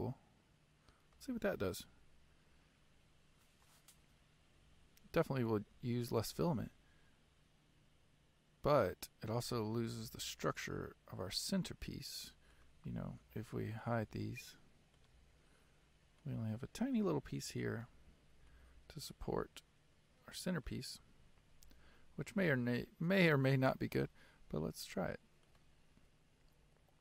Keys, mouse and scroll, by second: 1.8 click, 6.2-9.0 middle drag, 9.5-10.1 scroll up 5, 10.1-12.6 middle drag, 12.6 click, 13.2 h, 14.0 click, 14.1 h, 15.1 click, 15.1 h, 16.4-18.0 middle drag, 18.0-18.5 scroll up 4, 18.5-21.0 middle drag, 21.0-23.8 scroll down 7, 23.8 click.